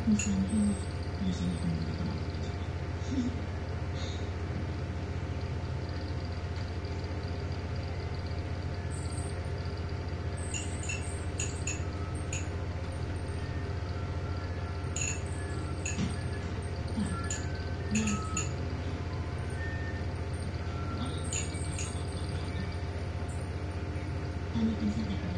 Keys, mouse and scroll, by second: 0.0 click, 1.7 click, 2.6 click, 3.3-4.3 drag, 5.3 click, 6.6 5, 8.5 click, 12.1 click, 13.2-13.8 ctrl+scroll down 1, 14.5-16.0 ctrl+scroll down 2, 16.4-17.4 scroll up 2, 18.1 click, 19.7 Delete, 21.2 click, 22.2 ctrl+a, 24.5 click.